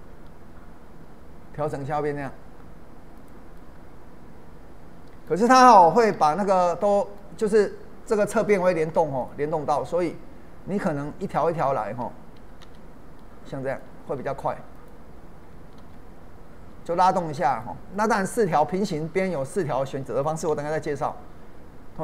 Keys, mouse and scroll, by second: 3.2 click, 3.5-6.1 middle drag, 6.1 ctrl+z, 6.9 middle click, 7.8-8.1 scroll up 1, 8.1 middle click, 9.2-12.3 drag, 12.6 ctrl+b, 13.7 click, 15.8 ctrl+b, 17.5 click, 17.9-19.5 middle drag, 19.5 click, 20.5 ctrl+b.